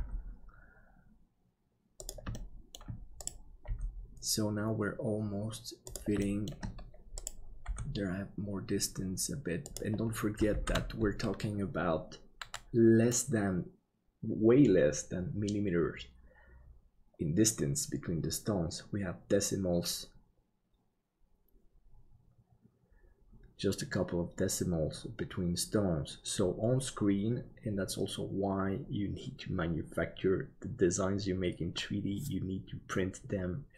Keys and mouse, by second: 2.3 shift+middle click, 3.6 g, 6.2 shift+middle click, 7.6 g, 11.2 ctrl+s.